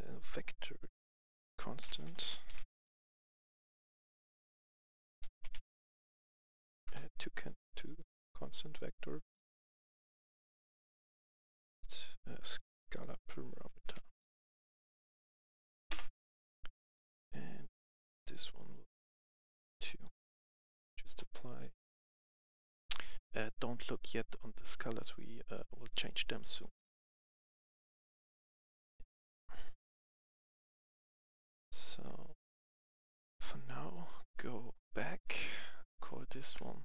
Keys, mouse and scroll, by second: 0.8 right click, 1.7-2.4 typing, 4.8-5.6 typing, 6.7 Return, 7.9 click, 12.8 right click, 13.7-15.4 typing, 16.0 Return, 16.8 click, 19.4 click, 19.9 click, 22.3 F10, 24.0-26.8 drag, 26.8 right click, 27.3 scroll down 1, 29.8 click, 30.8-33.3 drag, 33.4 F10, 33.9 click, 36.1 F2.